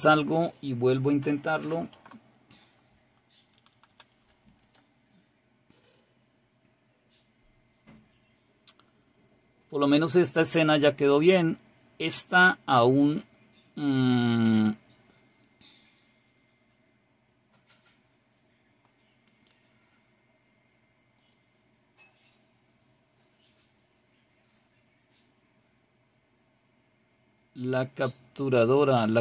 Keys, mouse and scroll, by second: 0.0 click, 11.0 click, 19.8-21.1 scroll down 2, 21.1 click, 24.7-25.4 scroll up 2, 25.4-27.6 scroll up 1, 27.6-28.1 scroll down 2, 28.1-29.0 scroll down 1, 29.0-29.2 scroll down 1.